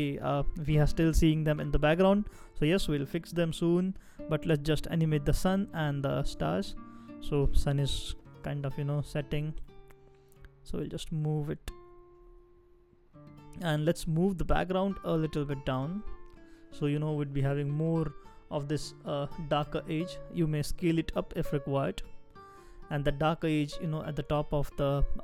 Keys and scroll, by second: 5.8 shift+Down, 6.2 shift+Down, 6.3 shift+Down, 9.1 shift+Right, 9.6 shift+Right, 9.8 shift+Down, 10.3 shift+Down, 10.4 shift+Down, 14.4 shift+Up, 14.7 shift+Up, 15.2 shift+Down, 15.4 shift+Down, 15.5 shift+Down, 17.9 shift+Up, 18.5 shift+Up, 23.2 shift+Down, 23.4 shift+Down, 23.6 shift+Down.